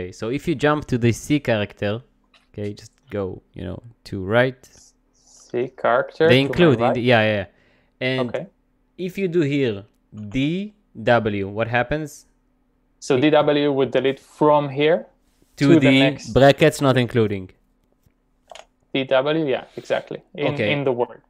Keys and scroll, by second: 6.0-7.0 typing, 10.2 typing, 18.3-19.1 typing.